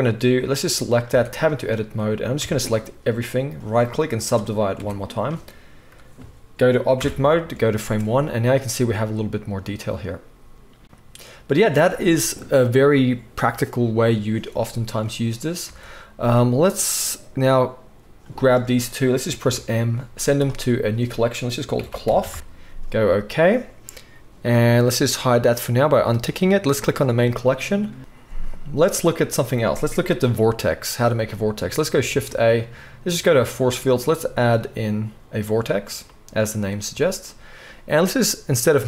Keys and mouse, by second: 0.5-1.6 right drag, 1.1 Tab, 1.6-2.4 drag, 2.4 a, 4.8 Tab, 7.0 shift+Left, 7.8-10.0 drag, 7.8 space, 10.0-18.4 right drag, 15.6 space, 18.4-24.6 middle drag, 18.5 click, 18.5 right click, 19.4 m, 24.6 right click, 25.4 middle click, 25.5-26.8 right drag, 26.8 middle click, 26.9-34.8 right drag, 32.0 shift+a, 34.8 click, 35.1-38.8 right drag.